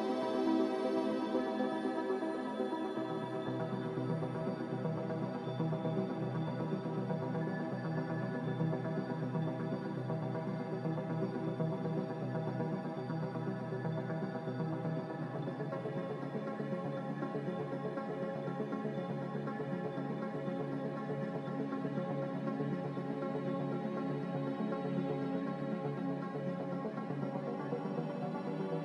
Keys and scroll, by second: 0.4 a, 7.3-8.7 typing, 11.4-12.2 typing, 16.3-17.0 typing, 18.4-19.1 typing, 21.4-22.1 typing, 24.7-26.3 typing, 27.7 space.